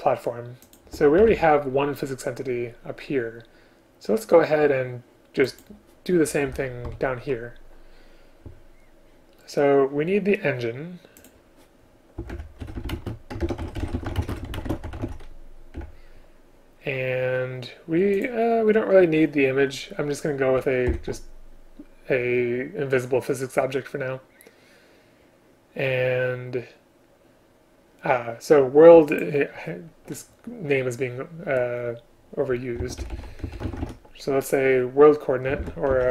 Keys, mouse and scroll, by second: 0.7 shift+click, 1.3 ctrl+c, 6.5 Return, 7.0 ctrl+v, 12.4 Return, 13.0 space, 13.5 ctrl+BackSpace, 14.3 space, 15.8 Return, 20.9 shift+Delete, 35.6 ctrl+BackSpace.